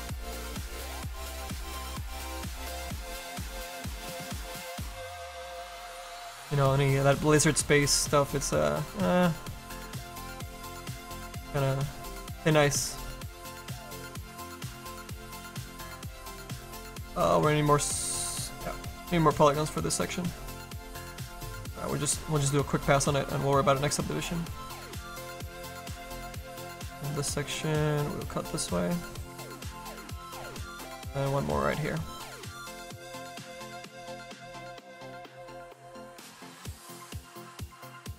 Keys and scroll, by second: 1.6 ctrl+z, 32.3 s.